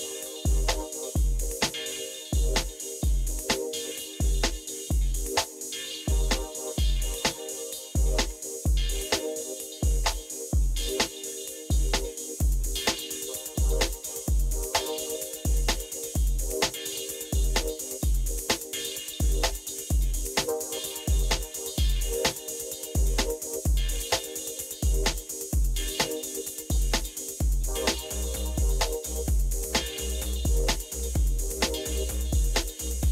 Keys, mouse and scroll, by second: 0.5 Return, 2.0 Up, 2.5 Down, 3.2 Down, 3.3-5.6 Down, 8.0 Return, 8.0 Down, 21.2 Right, 22.4 Return, 28.6 Down, 30.7 Up, 31.0 Up, 31.7 Up, 32.8 Up.